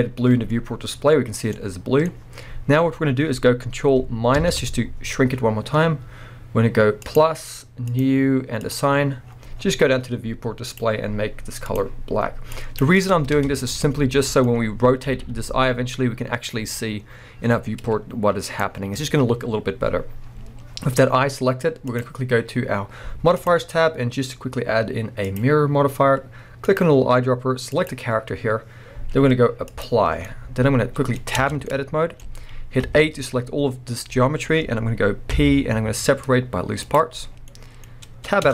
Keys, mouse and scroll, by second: 0.0-1.1 scroll down 1, 1.8-6.5 middle drag, 4.4 ctrl+KP_Subtract, 5.7-6.5 scroll up 2, 7.0-10.8 drag, 9.3-10.7 scroll down 2, 11.7 click, 13.2 scroll down 2, 13.4 Tab, 13.8-18.6 middle drag, 14.6-15.0 scroll up 2, 15.0 r, 18.6 right click, 18.7 scroll down 1, 21.9 click, 23.4-26.8 drag, 29.7 click, 30.2-30.9 middle drag, 31.3 Tab, 31.6 middle click, 32.3 scroll up 1, 32.8-37.4 middle drag, 32.8 a, 35.3 p, 37.3 scroll down 3, 37.4 middle click, 38.4 Tab.